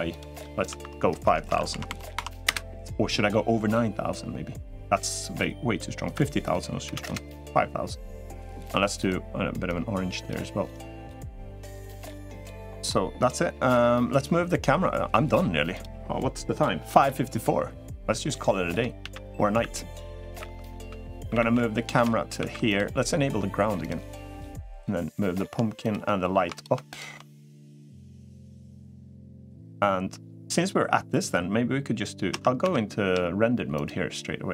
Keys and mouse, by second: 0.1-3.3 drag, 2.1 0, 12.0-12.6 middle drag, 19.4 shift+f, 25.6 shift+click, 26.3 click, 27.8 click, 33.3 z, 34.3 middle click.